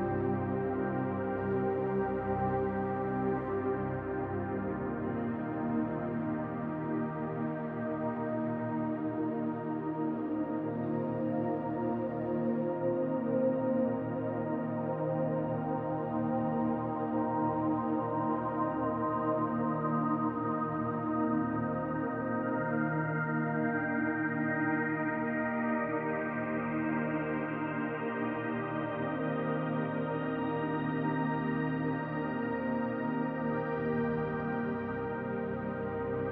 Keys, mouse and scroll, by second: 0.3 click, 1.4 r, 2.7 click, 4.1-5.5 scroll down 5, 4.5 Tab, 5.5 shift+middle click, 5.9 middle click, 7.0-7.7 scroll up 3, 7.5 middle click, 7.9 middle click, 8.0 shift+middle click, 11.1-12.0 scroll up 2, 11.5 click, 12.0 Tab, 12.9 click, 14.1 l, 15.4 l, 15.9 middle click, 18.5 s, 24.5 middle click, 26.3-27.2 scroll up 2, 27.2 middle click, 28.9 alt+click, 30.6 click, 31.5 click, 31.6 alt+click.